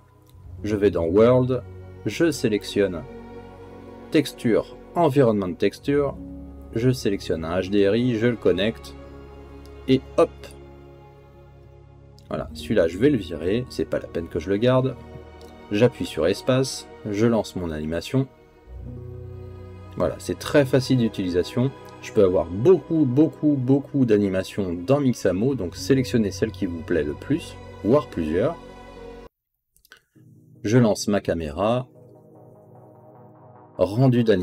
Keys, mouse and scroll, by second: 0.9 click, 4.4 n, 4.7-7.4 drag, 9.1-10.3 drag, 11.8 middle click, 13.0 click, 14.5 Delete, 17.1 space, 21.6 middle click, 23.7 middle click, 26.7 click.